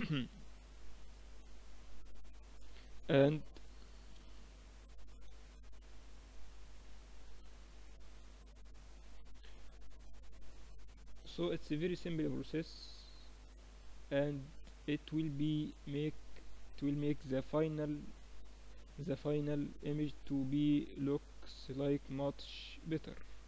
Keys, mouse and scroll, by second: 0.4-2.3 drag, 4.4 shift+b, 7.3-8.8 drag, 8.8 middle click, 10.1-11.1 middle drag, 11.1-13.1 drag, 13.7-16.7 middle drag, 16.7-21.8 drag, 21.9-23.4 drag.